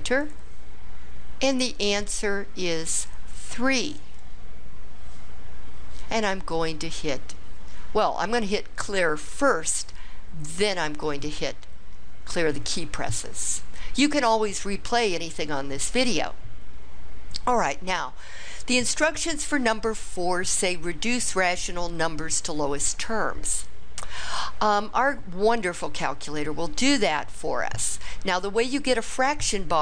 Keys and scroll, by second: 0.2 Return.